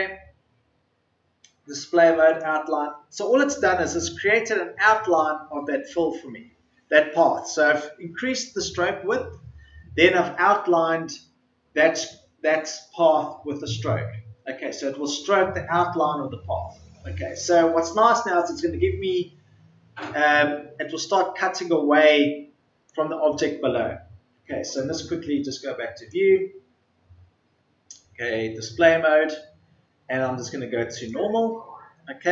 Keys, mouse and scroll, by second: 27.0 ctrl+z.